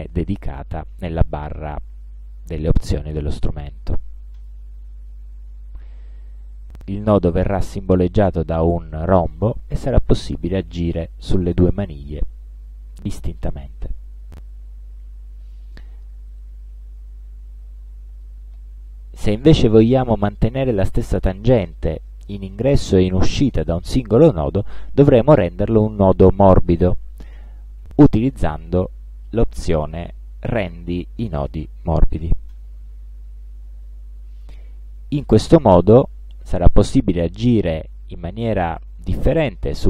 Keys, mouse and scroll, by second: 4.4 click, 9.4-10.4 drag, 11.3-13.7 drag, 17.6 click, 32.6 click, 35.1-37.5 drag, 38.9-39.8 drag.